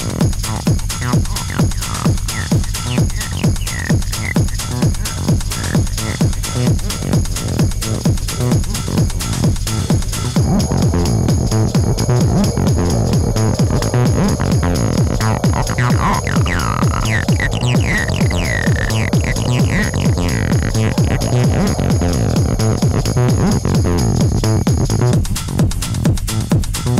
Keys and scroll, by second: 4.4 3, 5.3 ], 5.6 Delete, 7.5 4, 9.8 3, 11.5 4, 22.2 3.